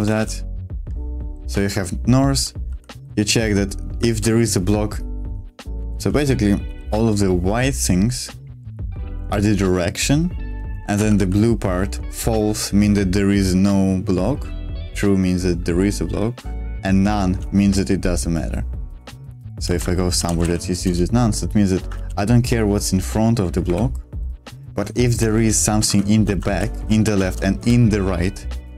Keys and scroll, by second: 0.0-4.0 typing, 5.8 Escape, 6.6 b, 6.8 b, 19.4-20.9 typing, 21.9 shift+v, 23.7 Escape, 24.1 j, 25.2-27.7 typing, 25.8 Escape.